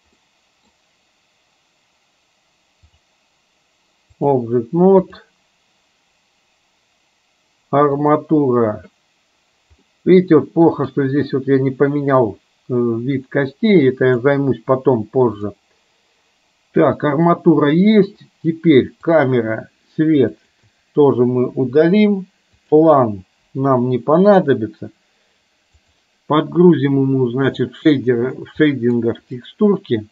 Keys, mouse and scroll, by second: 0.4 middle click, 2.9-4.4 drag, 5.1 click, 9.9-11.1 middle drag, 15.6 click, 16.9 click, 20.4 shift+click, 21.7 Delete, 22.7 click, 25.8 click.